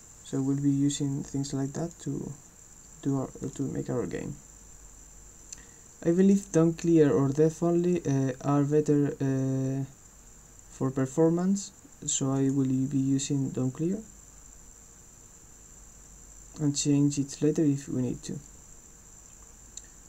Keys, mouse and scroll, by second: 1.8 click, 3.4 click, 6.2 click, 12.5 click.